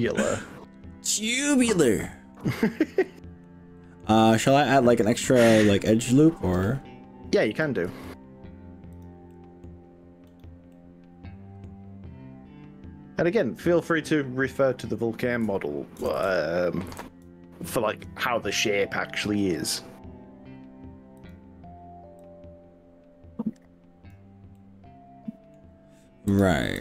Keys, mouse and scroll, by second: 0.7-2.4 middle drag, 2.6 ctrl+z, 3.0-4.0 middle drag, 4.4-6.2 middle drag, 7.9 ctrl+r, 9.4 middle click, 10.4 right click, 10.7 middle click, 14.0 click, 16.0 ctrl+KP_Add, 16.2 ctrl+KP_Add, 17.0 ctrl+KP_Add, 19.2 s, 21.2 click, 22.4 click, 24.5-25.5 middle drag.